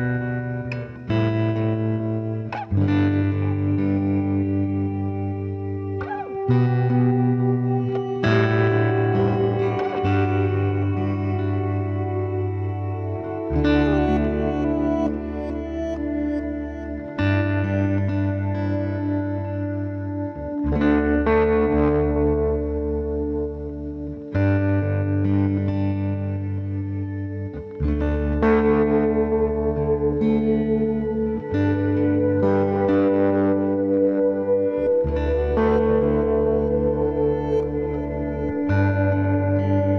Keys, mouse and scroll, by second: 0.1-1.9 middle drag, 0.5 c, 4.7-6.2 right drag, 5.3-7.5 middle drag, 6.2 c, 7.5 right click, 8.2 KP_Decimal, 8.4 ctrl+s, 8.4 right click, 9.3 middle click, 12.1 e, 12.2-13.2 middle drag, 15.1 right click, 16.0 ctrl+z, 16.5 ctrl+z, 17.1 ctrl+r, 19.2-21.1 right drag, 19.6 c, 27.7-29.5 right drag, 32.4 ctrl+r, 37.6 ctrl+r, 39.1-39.9 right drag, 39.7 KP_Decimal.